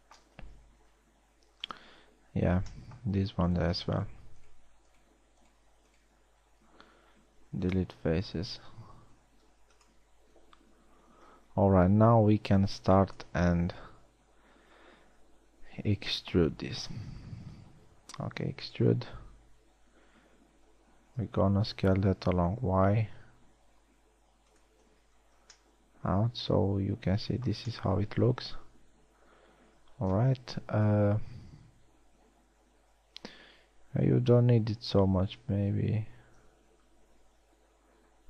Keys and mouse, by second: 1.4 ctrl+Tab, 3.0 z, 7.0 x, 9.5 ctrl+Tab, 11.5 KP_1, 11.7 z, 12.9 b, 18.6 e, 20.0 KP_3, 22.2 s, 25.8 z, 31.4 KP_1, 32.1 z, 36.0 KP_3, 37.6 s.